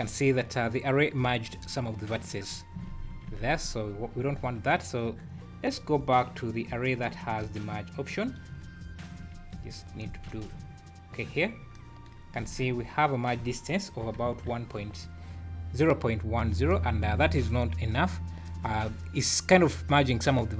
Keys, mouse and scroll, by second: 0.0-0.3 scroll up 4, 2.3-2.7 scroll down 11, 2.9 ctrl+z, 3.1-3.7 ctrl+z, 4.0 ctrl+z, 4.2 ctrl+z, 5.3 scroll down 2, 5.8-6.5 scroll up 4, 7.0 scroll down 2, 8.2-9.0 scroll up 7, 9.4 ctrl+z, 10.1 ctrl+z, 12.4 z, 13.9 KP_1, 14.3 KP_3, 14.8 scroll up 6, 17.3 scroll up 1, 18.2 scroll up 2.